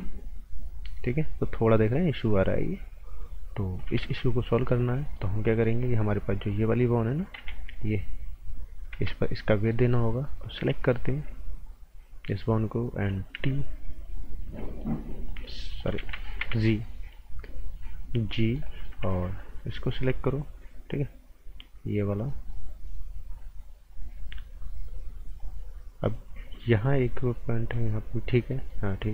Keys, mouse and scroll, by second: 4.0 ctrl+z, 4.3-4.9 scroll up 2, 4.5 right click, 5.0 right click, 6.4 click, 7.3 z, 7.7 click, 8.9 ctrl+z, 9.7 right click, 10.6-11.0 typing, 13.1-13.8 typing, 14.4 scroll up 1, 14.6 right click, 15.2 click, 15.7-16.9 typing, 17.2 click, 18.3 right click, 19.4 click, 22.2 right click, 22.9 scroll down 1, 23.9 click, 25.9-26.8 scroll up 1, 26.8 right click.